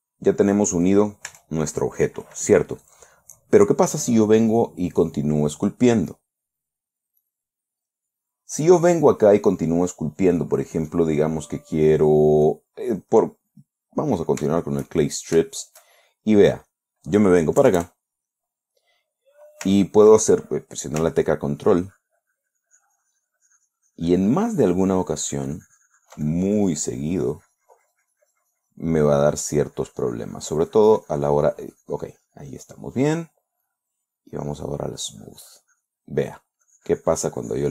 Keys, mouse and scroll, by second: 1.8 Tab, 6.6 click, 7.7 click, 10.5 right click, 11.4 click, 12.9 click, 13.8-14.6 middle drag, 14.9-17.0 shift+middle drag, 17.2 shift+click, 18.1 KP_Add, 18.8 click, 18.8 middle click, 18.9 click, 19.1 middle click, 22.1-30.0 ctrl+drag, 30.0-33.3 drag, 34.1 click, 34.8 click, 35.4-37.0 drag, 37.1-37.7 drag.